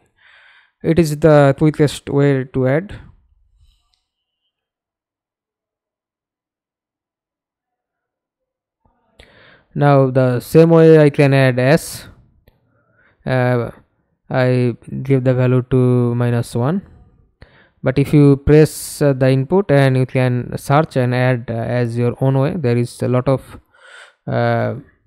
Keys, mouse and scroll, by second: 0.8 alt+click, 3.7-4.5 w, 9.9 s, 10.4 s, 12.6 click, 13.1 -, 13.6 Return, 16.2 w, 18.0-18.3 scroll down 1, 18.3-21.4 scroll up 1, 21.6 s, 22.4-25.0 scroll down 11.